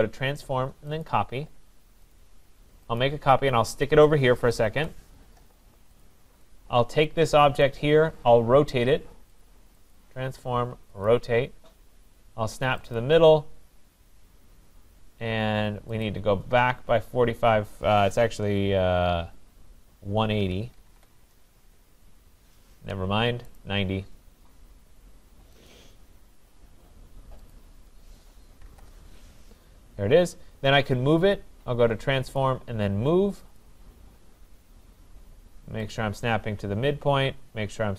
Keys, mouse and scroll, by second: 1.0 click, 2.2 click, 3.0 click, 4.8 Escape, 6.0 click, 7.6 click, 9.4 click, 10.0 click, 11.1 click, 13.1 click, 16.1 click, 20.1-21.7 typing, 23.6 right click, 25.7 click, 27.5 click, 28.4-29.2 typing, 32.4 click, 33.6 click, 34.4 scroll, 35.9 click, 36.4-37.1 scroll down 9.